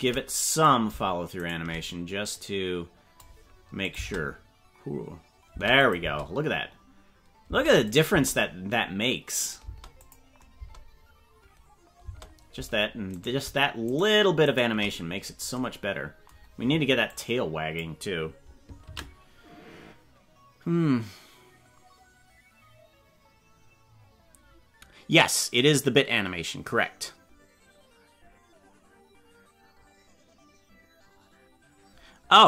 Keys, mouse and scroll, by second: 0.6 right click, 1.5 shift+right click, 2.3-3.3 drag, 3.9 click, 3.9 space, 5.5 space, 5.8 click, 6.0 space, 7.5 space, 7.9 click, 8.1 space, 9.6 space, 10.0 click, 10.6 space, 12.1 space, 13.3 right click, 14.0 shift+right click, 14.8 right click, 17.1 click, 18.9 ctrl+s.